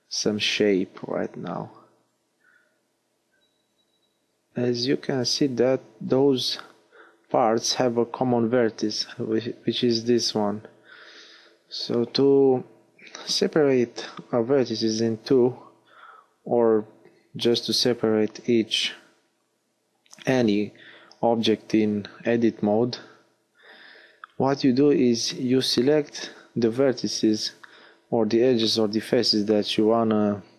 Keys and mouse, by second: 0.4-2.8 drag, 5.3 l, 12.2 middle click, 12.9-17.5 drag, 17.5 middle click, 17.5 g, 18.5 click, 20.3 g, 20.4 click, 24.9 middle click, 27.4 l, 28.3 h.